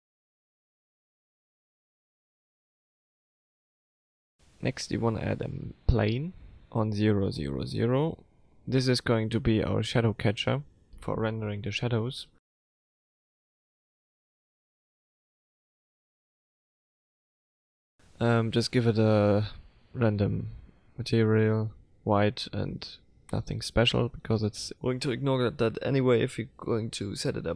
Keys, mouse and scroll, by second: 4.0 click, 4.3 middle click, 5.2 F3, 7.0 Down, 9.7 s, 12.3 KP_0, 13.2-15.2 scroll down 1.